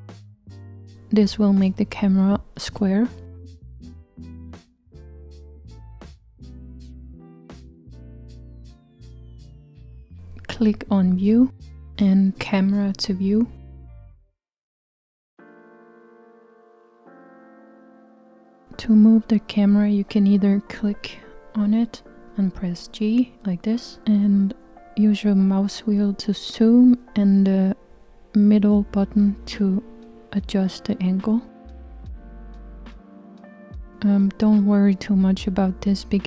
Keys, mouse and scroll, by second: 11.8 click, 14.3 click, 17.9 g, 20.7 click, 21.8-26.1 g, 26.6-27.8 scroll up 3, 27.9-33.3 middle drag, 33.3 g.